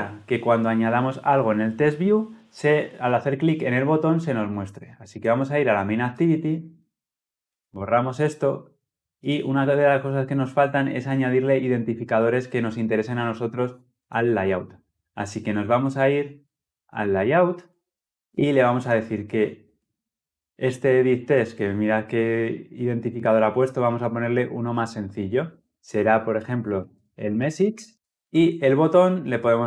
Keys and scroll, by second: 17.5 ctrl+b.